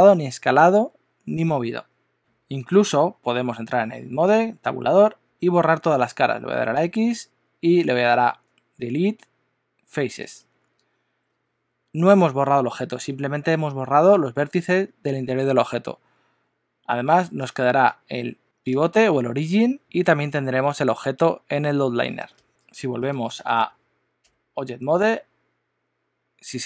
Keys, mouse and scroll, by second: 2.7 click, 3.8 Tab, 6.7 x, 24.2 Tab.